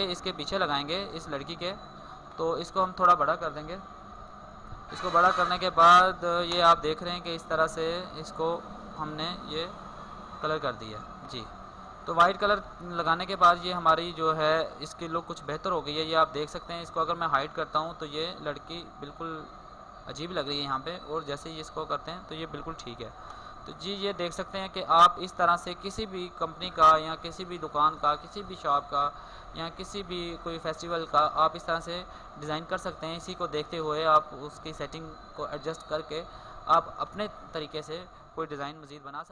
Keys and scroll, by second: 9.2 ctrl+0, 15.2 ctrl+0, 22.7 ctrl+0, 23.2 alt+space.